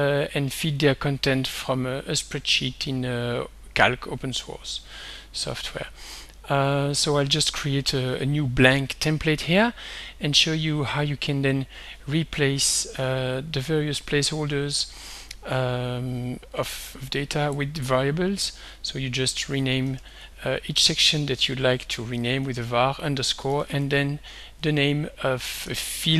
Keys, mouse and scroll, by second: 0.8 click, 1.6 click, 2.8 click, 5.5 click, 6.7 click, 12.6 ctrl+scroll up 2, 13.3-13.7 ctrl+scroll down 2, 14.3 ctrl+scroll up 2, 16.6-17.7 middle drag, 18.5 click, 19.7 Home, 20.0 shift+End, 21.5-24.3 typing, 25.5 shift+5.